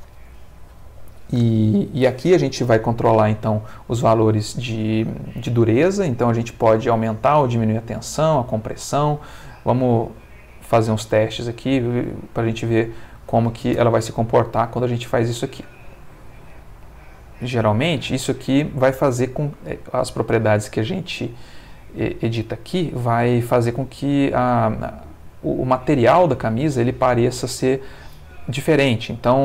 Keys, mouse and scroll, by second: 9.1 click, 10.1 click, 10.9 click, 11.6 click, 13.1 click, 13.7 space.